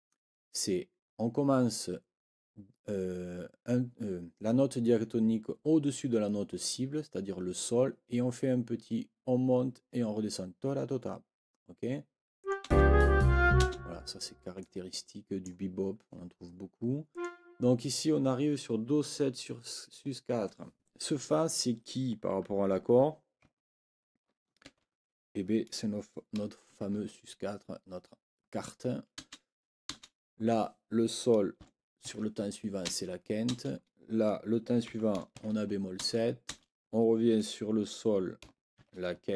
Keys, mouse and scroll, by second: 12.4 click, 12.6 space, 13.6 space, 14.6-15.6 drag, 17.1 click, 24.6 ctrl+l, 29.2 space, 29.9 space, 32.0 shift+9, 32.9 space, 34.9 b, 36.0 space, 38.8 shift+(.